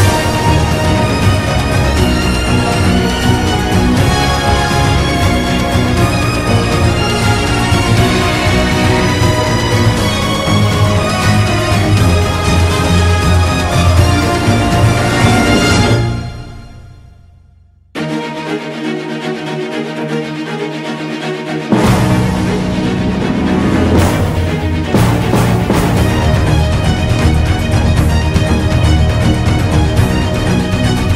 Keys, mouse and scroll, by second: 4.9 b, 4.9 ctrl+=, 8.9 ctrl+-, 10.7 ctrl+-, 10.9 ctrl+=, 13.2 right click, 14.4 ctrl+=, 17.7 ctrl+z, 20.4 ctrl+=, 22.5 ctrl+-, 23.3 ctrl+-, 24.6 ctrl+z, 28.0 ctrl+-, 28.1 ctrl+=, 30.1 ctrl+=.